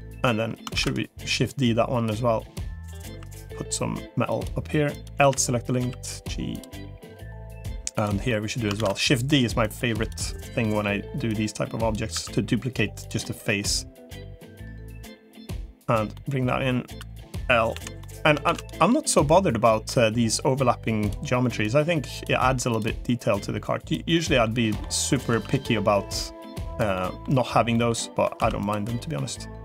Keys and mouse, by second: 0.6 shift+d, 1.4 click, 2.4 click, 3.0 e, 4.8 click, 5.0 l, 5.6 g, 6.8 middle click, 7.8 click, 8.2 middle click, 8.6 shift+d, 9.6 click, 10.6 middle click, 11.2 click, 12.0 e, 13.2 middle click, 15.4 click, 16.0 middle click, 17.6 l, 17.8 middle click, 18.4 shift+d, 19.0-20.4 drag, 21.6 click, 23.2 click, 24.0 middle click, 25.2 1, 25.4 click, 26.0 click, 26.8 middle click, 27.6 middle click, 28.8 middle click.